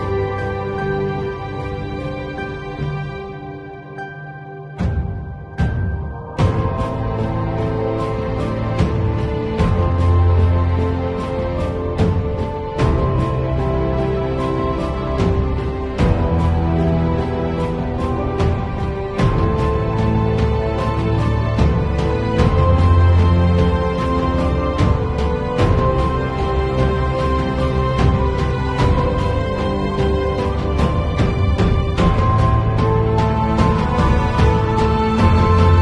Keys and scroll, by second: 12.5 3, 17.3 x, 18.6 x, 20.5 x, 25.4 space, 27.1 space, 30.0 space, 32.3 [, 33.9 ].